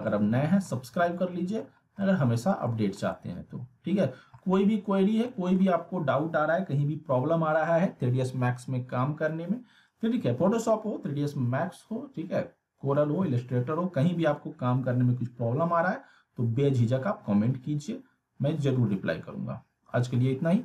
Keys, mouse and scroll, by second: 0.8 scroll down 1, 1.0-1.6 alt+middle click, 1.8 scroll down 1, 2.0-2.6 alt+middle click, 3.1-4.0 alt+middle click, 4.4-5.0 alt+middle click.